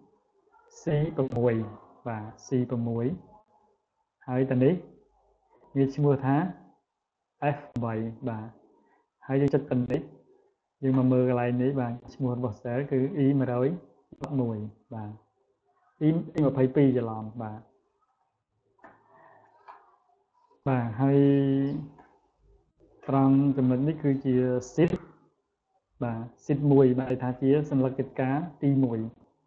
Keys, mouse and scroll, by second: 0.0 click, 2.6 click, 3.0 click, 4.4 click, 7.0 click, 9.4 click, 11.7 click, 14.1 click, 18.0 click, 19.0 click, 20.1 scroll down 1, 21.0-21.9 scroll down 1, 23.0 click.